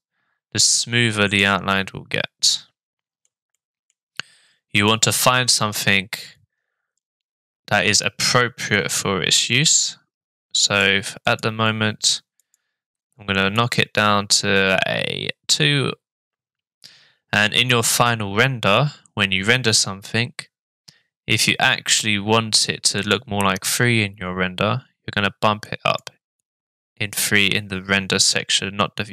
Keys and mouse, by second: 0.8-1.4 middle drag, 2.5-3.2 shift+middle drag, 3.5-3.9 middle drag, 4.9 middle click, 10.6 click, 11.3 click, 12.4 click, 13.5 click, 25.8 click.